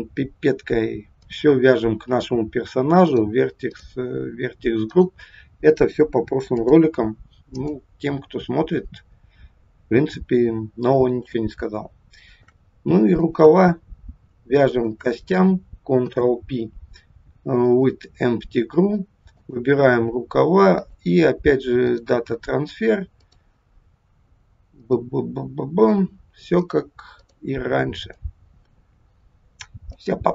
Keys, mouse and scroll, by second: 3.1 click, 3.7 click, 4.1-5.3 scroll down 3, 5.3 click, 6.6 click, 10.7 scroll up 1, 11.2 shift+middle click, 13.2 click, 14.6 shift+click, 15.9 ctrl+p, 19.4 click, 20.8 click, 23.2 click, 26.6 click, 27.1 click, 28.6 click, 29.8 click.